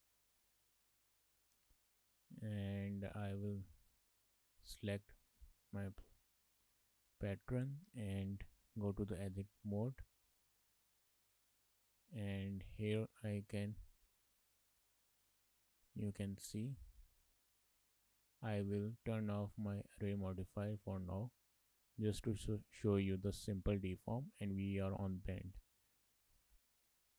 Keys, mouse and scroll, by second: 0.9 click, 1.5 shift+middle click, 1.8 middle click, 3.0 Tab, 5.0 click, 5.6 middle click, 6.9 shift+middle click, 7.4 middle click, 7.8 Tab, 8.9 shift+middle click, 9.1 middle click, 10.1 middle click, 11.6 click, 14.8 click, 17.2 middle click, 19.6 click, 20.1 click, 20.6 shift+middle click, 20.8 middle click, 25.7 click.